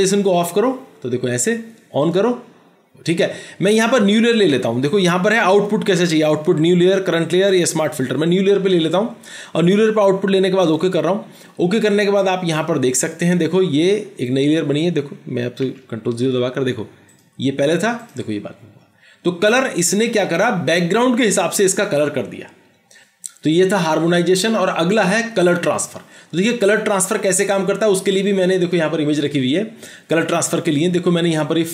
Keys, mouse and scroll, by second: 15.8 ctrl+0.